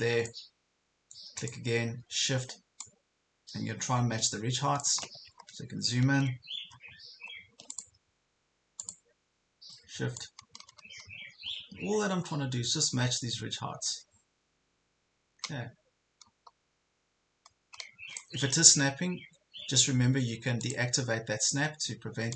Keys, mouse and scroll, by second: 5.3 ctrl+scroll up 1, 6.8 ctrl+scroll down 1, 7.8 click, 10.2-18.2 shift+drag, 20.6-22.3 drag.